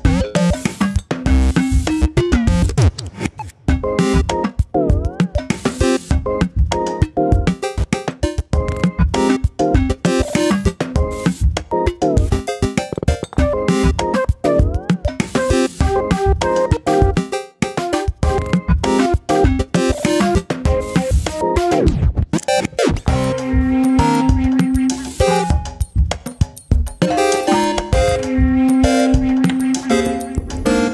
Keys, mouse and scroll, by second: 0.0 click, 0.9 scroll down 1, 1.2 scroll up 1, 1.5 middle click, 2.5-3.0 middle drag, 3.0 click, 3.1-3.9 scroll down 1, 3.9 shift+a, 6.3 g, 8.0-9.0 middle drag, 9.0 n, 10.5-12.6 drag, 13.0-17.4 drag, 17.9 scroll down 2, 17.9 middle click, 18.2 g, 18.7 middle click, 19.0 n, 19.4-20.0 middle drag, 20.0-20.4 scroll up 1, 20.4 shift+middle click, 20.6 scroll up 1, 20.9 middle click, 21.2 Tab, 21.4 scroll up 1, 21.7 scroll down 1, 22.0 ctrl+r, 23.5-23.9 scroll up 1, 23.9 shift+middle click, 24.1-24.4 scroll up 1, 24.4 ctrl+r, 25.7 middle click, 26.2-27.0 scroll down 1, 27.0 2, 27.3 middle click, 28.0 alt+click, 28.2 middle click, 28.6 shift+click, 28.8-29.8 shift+middle drag, 29.8 click, 29.9 scroll up 1, 30.2 middle click, 30.4 `.